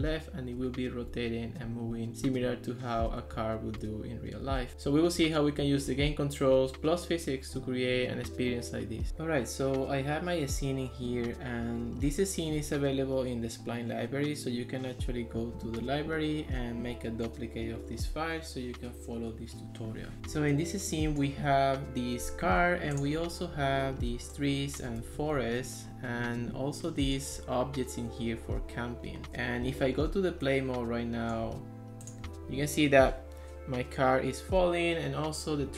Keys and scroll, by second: 0.2 a, 1.1 d, 1.4 a, 2.5 d, 3.9 a, 5.0 d, 5.9 a, 6.8 d, 7.7 a, 24.2 ctrl+s, 25.1 ctrl+x, 29.2 Escape.